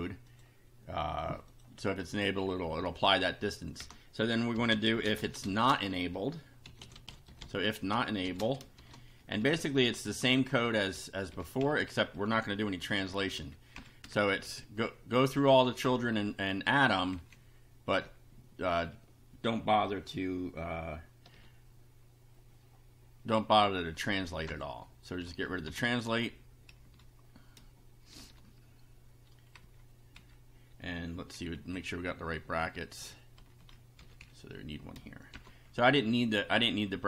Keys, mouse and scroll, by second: 0.3 click, 1.5 click, 3.0 Return, 3.8 Return, 4.3-8.8 typing, 9.2 shift+Up, 10.4 shift+Home, 10.7 shift+Down, 11.6 shift+End, 12.8 ctrl+c, 13.0 ctrl+Down, 13.8 ctrl+End, 14.0 ctrl+Return, 14.4 ctrl+v, 15.3 Up, 15.8 Home, 16.1 shift+End, 17.2 shift+Left, 18.0 shift+Delete, 23.8 End, 24.4 BackSpace, 25.2 Home, 25.6 BackSpace, 26.8 Up, 28.2 shift+[, 29.6 Down, 31.6 Left, 32.4 Down, 33.4 shift+Down, 33.9 shift+Up, 35.3 shift+].